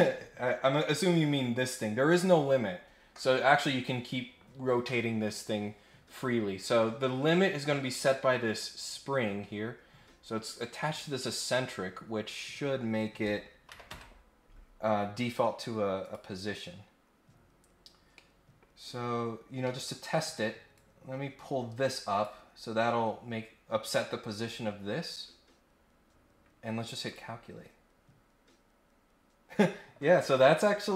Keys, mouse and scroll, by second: 0.1 scroll up 2, 1.5 scroll down 2, 1.7 scroll up 2, 6.4-6.9 scroll down 2, 7.0 scroll up 1, 9.8 scroll down 1, 10.0 scroll up 1, 16.0 click, 17.6-18.1 scroll down 2, 18.1 middle click, 19.6 middle click, 20.7-22.2 drag, 24.8 scroll up 2, 27.0 click.